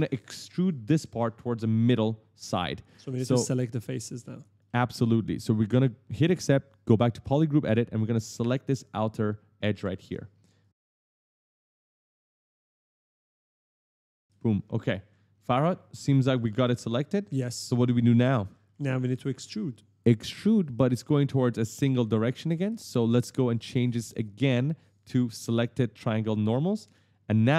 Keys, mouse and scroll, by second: 3.8 click, 4.4 right click, 4.5 s, 4.6 right click, 6.9 click, 9.4 right click, 9.5 w, 9.6 right click, 10.4 shift+click, 10.9 right click, 11.2 shift+click, 11.7 right click, 12.1 w, 12.6 shift+click, 13.0 right click, 13.4 shift+click, 14.0 right click, 14.5-19.2 typing, 14.9 right click, 17.8 right click, 18.3 right click, 18.5 right click, 18.7 right click, 18.8 right click, 18.9 right click, 20.1 click, 20.8 right click, 20.8 right click, 21.0 right click, 21.3 right click, 21.5 right click, 21.8 right click, 22.0 right click, 22.1 right click, 22.3 right click, 22.4 right click, 22.5 right click, 22.7 right click, 22.8 right click, 22.8 right click, 24.0 click, 25.8 click, 26.3 right click, 26.4 right click, 26.5 right click, 26.6 right click, 26.7 right click, 26.8 right click, 27.0 right click, 27.1 right click, 27.3 right click.